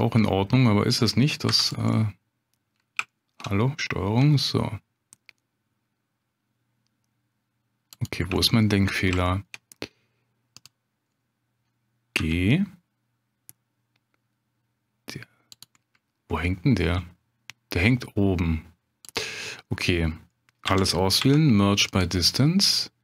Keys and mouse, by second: 1.5 2, 1.7 middle click, 3.1 shift+middle click, 4.2 g, 8.3 shift+middle click, 9.3 shift+click, 10.5 click, 12.1 g, 16.8 g, 19.5 middle click, 20.6 a, 21.2 m.